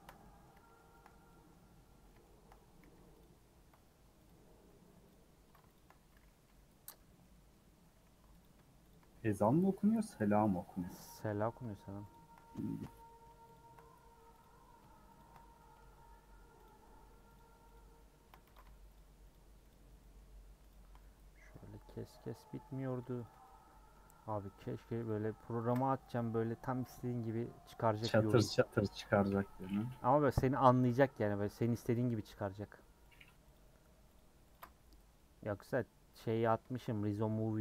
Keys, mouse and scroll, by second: 1.1 scroll down 1, 1.2-2.9 scroll up 5, 1.3 middle click, 2.1 middle click, 2.9 3, 3.2 click, 4.2 click, 5.1 ctrl+click, 5.7 shift+click, 6.4 ;, 6.8 scroll down 3, 7.0 middle click, 7.6-8.1 scroll up 2, 9.1-10.3 shift+middle drag, 10.3 alt+shift+click, 10.6 shift+middle click, 11.1 alt+shift+click, 11.4 scroll down 2, 12.1 alt+shift+click, 12.3-13.5 shift+middle drag, 13.5 alt+shift+click, 14.4 alt+Left, 15.2 alt+shift+Left, 15.6-16.6 middle drag, 16.6 alt+shift+Left, 16.8 shift+middle click, 17.3 alt+shift+click, 17.7 alt+shift+click, 18.4 ctrl+z, 18.9 alt+shift+click, 19.3 alt+shift+click, 19.7 alt+shift+click, 20.0 shift+middle click, 20.7 alt+shift+click, 21.5 middle click, 22.4 scroll down 1, 22.7 middle click, 23.2 alt+click, 23.4-25.1 middle drag, 25.1 click, 25.7 ctrl+click, 26.3 scroll down 2, 26.4-28.0 middle drag, 28.0 click, 28.5 ctrl+click, 28.9 ctrl+click, 29.8 middle click, 30.1 scroll up 1, 30.4-31.9 middle drag, 31.9 click, 32.4 ctrl+click, 33.1 ctrl+click, 33.5 ctrl+click, 34.1 ctrl+click, 34.5 ctrl+click, 35.2 middle click, 36.2-36.5 scroll up 2, 36.7-37.6 shift+middle drag.